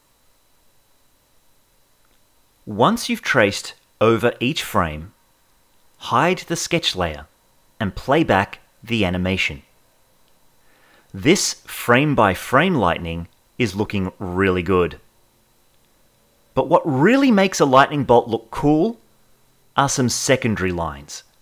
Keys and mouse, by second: 0.0 click, 1.0 Right, 1.1 middle click, 1.3 middle click, 1.7 click, 2.5 Right, 2.6 middle click, 2.9 click, 3.4 Right, 3.6 click, 4.0 Right, 4.1 click, 4.4 Right, 4.7 click, 8.1 space, 15.9 space, 16.9 Left, 17.1 Left, 17.3 Left, 17.5 Left, 17.9 Left, 18.1 Left, 18.5 Left.